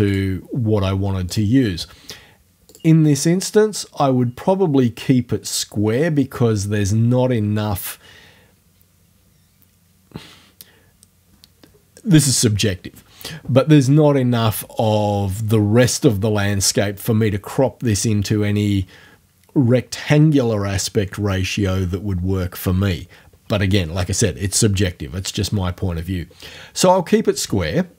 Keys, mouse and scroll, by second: 0.1 click, 1.3 click, 2.7 click.